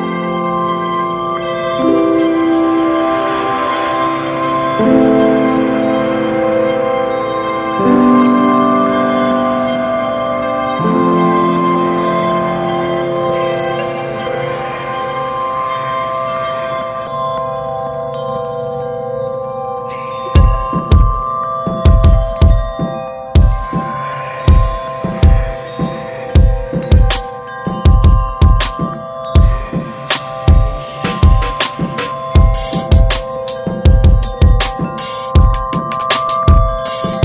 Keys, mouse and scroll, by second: 0.3 shift+middle click, 0.9 click, 1.5 click, 2.3 click, 4.8 click, 6.2 click, 6.9 click, 7.5 click, 8.0 click, 9.1 ctrl+z, 9.3 click, 10.0 click, 10.9 shift+middle click, 11.3 click, 11.9 click, 12.8 ctrl+z, 13.0 click, 13.7 click, 15.4 ctrl+z, 16.1 click, 17.7 click, 18.4 click, 19.6 ctrl+z, 20.0-21.2 drag, 21.3 Tab, 21.4 drag, 21.6 alt+z, 21.8 click, 22.0-22.6 scroll down 8, 22.1 middle click, 22.6 ctrl+s, 22.9 middle drag, 23.0 scroll up 2, 23.8 ctrl+s, 25.4-25.9 scroll up 1, 25.9 click, 27.9 click, 28.6-30.0 drag, 30.2 Tab, 30.7 Tab, 31.3 click, 32.0 click, 33.0 Tab, 33.3 alt+z, 33.9 Tab, 34.1 alt+z, 34.6 click, 35.5 ctrl+z, 35.6 click, 36.4 click.